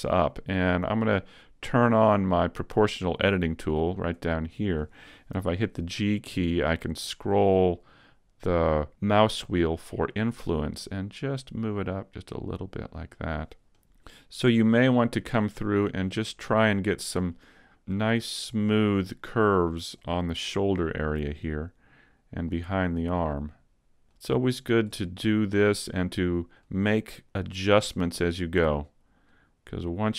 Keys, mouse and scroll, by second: 1.2 click, 5.4 g, 13.2 click, 13.3 middle click, 13.4 z, 13.8 right click, 14.6 click, 16.2 middle click, 17.8 right click, 18.0 middle click, 19.3 click, 20.3 middle click, 21.6 right click, 22.5 click, 24.5 middle click, 25.7 right click, 26.7 click, 27.3 middle click, 28.3 right click, 29.3 click.